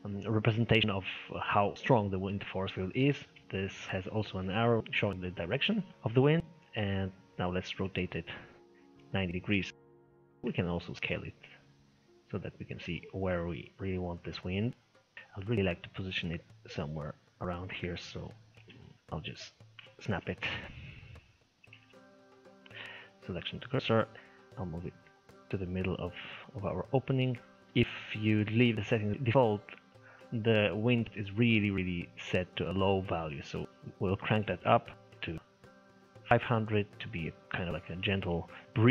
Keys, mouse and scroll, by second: 3.4-4.6 middle drag, 4.6 scroll down 1, 4.8-5.9 middle drag, 5.9 shift+s, 7.3 r, 10.1-11.1 shift+middle drag, 11.1 s, 15.1 click, 15.4-16.3 scroll up 4, 16.3 click, 18.5 shift+s, 18.9 scroll down 4, 19.2 click, 20.0 shift+s, 21.6 shift+s, 23.9 scroll up 2, 24.1 g, 27.7 middle click, 28.1-28.5 scroll up 2, 28.5-32.9 middle drag, 33.5-34.1 scroll down 2, 34.1-35.1 drag, 35.1 0, 36.4-36.7 scroll down 2, 36.8-38.9 middle drag.